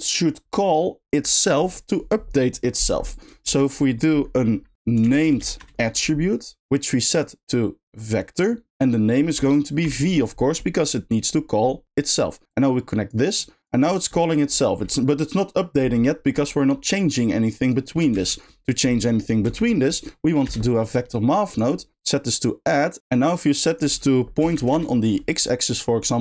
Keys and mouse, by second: 3.1 click, 7.1-8.1 drag, 8.8-9.8 drag, 12.6 click, 13.5 click, 17.5 click, 22.1 middle click, 23.1 middle click, 23.7-24.7 drag.